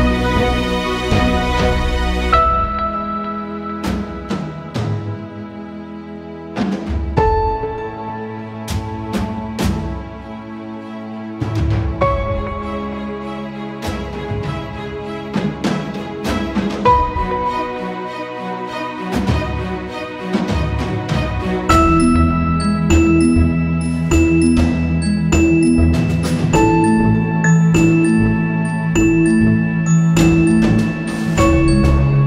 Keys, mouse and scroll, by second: 5.7 click, 6.9 click, 8.5 ctrl+c, 8.9 ctrl+f, 9.4 click, 10.5 right click, 11.4 click, 13.5 shift+click, 13.8 right click, 14.3 click, 15.0 ctrl+z, 15.1 click, 16.0 right click, 16.8-22.1 drag, 24.0-29.9 drag, 29.3-30.0 typing, 29.9-32.2 shift+drag, 31.4 typing.